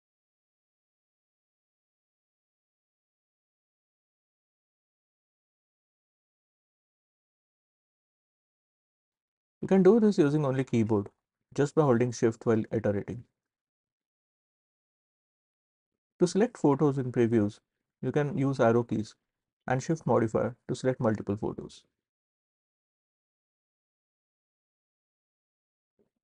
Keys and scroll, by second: 1.1 e, 2.0 e, 3.3 q, 4.4 q, 6.0 c, 7.2 c, 8.1 s, 10.9 w, 12.5 shift+w, 13.4 shift+w, 14.1 shift+w, 19.4 Left, 20.1 Left, 20.7 Left, 21.3 Right, 22.5 shift+Right, 23.3 shift+Right, 25.0 Left, 25.6 space.